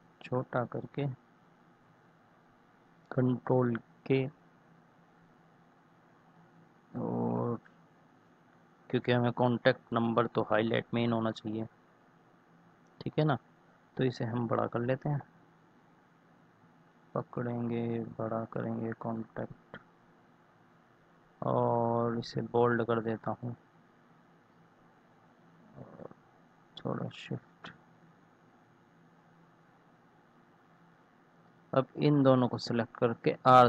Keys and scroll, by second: 3.8 ctrl+k, 11.7 ctrl+z.